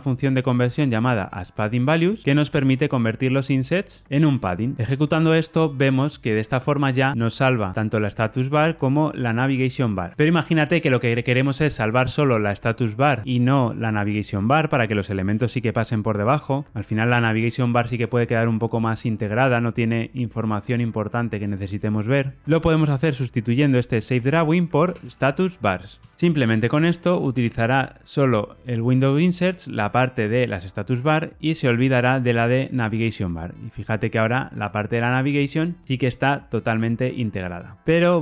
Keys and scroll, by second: 2.2 Return, 25.9 Return, 26.1 ctrl+r.